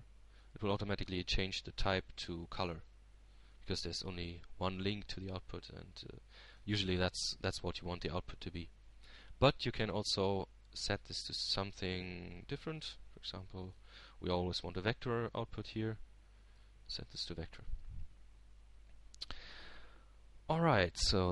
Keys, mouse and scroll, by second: 0.7-5.3 drag, 5.5-7.2 drag, 9.7-11.7 middle drag, 13.6 click, 17.4-19.2 drag, 19.3-20.9 drag.